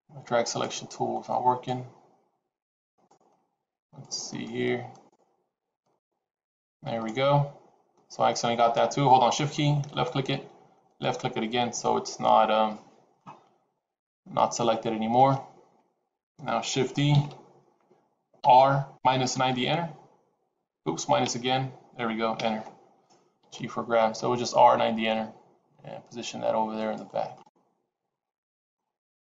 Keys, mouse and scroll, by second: 0.4 click, 1.1 click, 2.7 click, 3.2 click, 3.5 click, 4.2 click, 4.8 click, 5.7 click, 9.8 shift+click, 10.8 shift+click, 13.0 middle click, 15.6 KP_7, 17.1 shift+d, 23.4 g, 27.2 middle click.